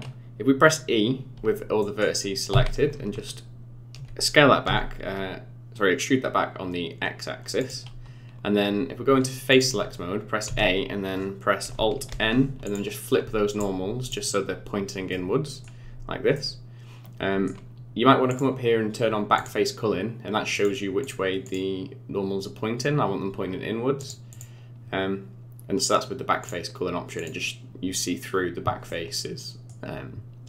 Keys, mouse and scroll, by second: 1.8 middle click, 2.5 e, 9.5 click, 10.5 a, 12.1 alt+n, 14.0 click, 15.1 middle click, 16.4 middle click, 18.3 click, 24.0 click, 24.3 click, 28.9 middle click.